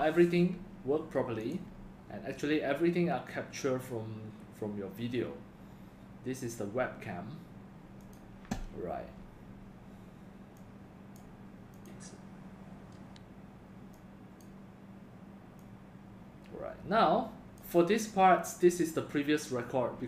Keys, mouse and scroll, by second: 3.4 drag, 13.9 click.